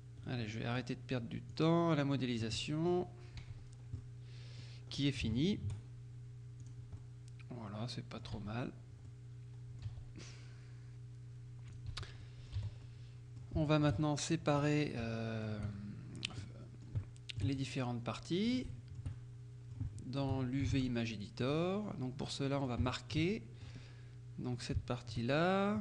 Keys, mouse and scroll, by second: 0.5 click, 0.5 right click, 1.6-3.5 drag, 2.7 right click, 3.5 Tab, 3.8 scroll down 1, 4.0 middle click, 5.0-5.4 scroll up 1, 5.4 shift+click, 6.7 click, 8.4 Tab, 8.6-10.4 scroll up 3, 9.9 z, 11.8 click, 12.0 z, 12.3 middle click, 12.7 z, 12.9 middle click, 13.7 shift+middle click, 15.1 shift+click, 15.8 shift+click, 16.6 click, 17.1 shift+click, 17.7 shift+click, 18.8 shift+click, 20.0 shift+click, 20.8 ctrl+shift+Tab, 21.5 click, 21.9-22.3 scroll up 1, 22.3 middle click, 22.9 shift+middle click, 24.6 shift+right click, 25.7 shift+scroll down 2.